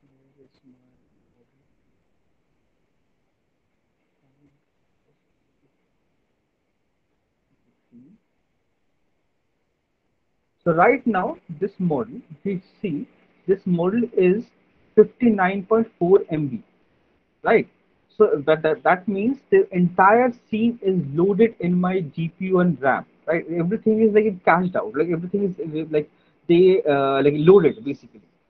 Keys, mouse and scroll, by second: 6.9 click, 8.8 middle click, 10.2 click, 12.6 click.